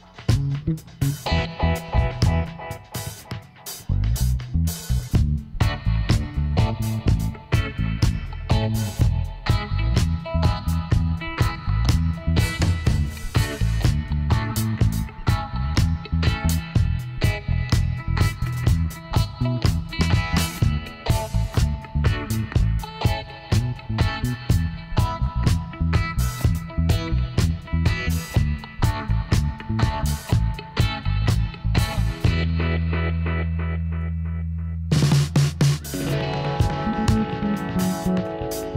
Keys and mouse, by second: 0.5 ctrl+r, 2.3-3.5 drag, 3.5 middle click, 4.8-6.9 middle drag, 6.9 click, 7.2 middle click, 8.1 right click, 8.3 g, 11.4 ctrl+r, 11.9-13.6 drag, 12.6 ctrl+r, 14.4 g, 15.9 click, 16.5 middle click, 17.1 middle click, 18.2-19.5 middle drag, 22.2-23.6 middle drag, 23.6-25.1 drag, 24.6 ctrl+r, 31.3-34.6 middle drag, 35.0-36.3 middle drag, 36.3 ctrl+r, 38.2 g.